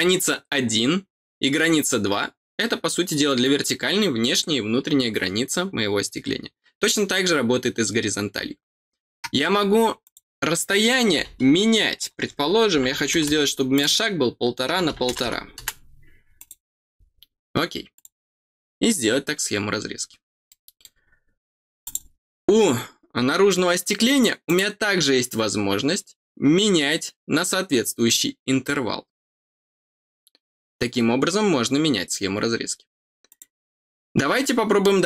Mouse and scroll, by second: 10.0 click, 13.7 click, 16.3 click, 17.9 click, 20.4 middle click, 20.8 middle click, 21.8 click, 24.4 click, 33.2 click, 34.3 middle click.